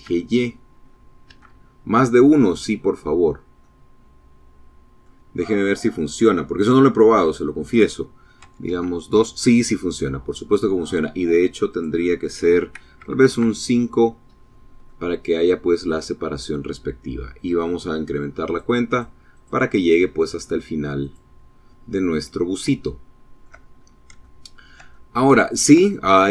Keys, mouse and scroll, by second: 0.1 KP_Enter, 2.1-2.5 scroll down 2, 2.5-4.0 drag, 6.1 click, 7.3 KP_2, 7.5 KP_Enter, 10.5 click, 11.8 KP_5, 12.2 KP_Enter, 13.7-15.5 drag, 17.3 click, 17.7 click, 18.2 click, 18.6 click, 19.1 click, 19.8 click, 21.0 click, 21.7 shift+click, 22.6 shift+scroll up 1, 23.1-24.7 shift+drag, 24.7 shift+click, 25.4 shift+middle click.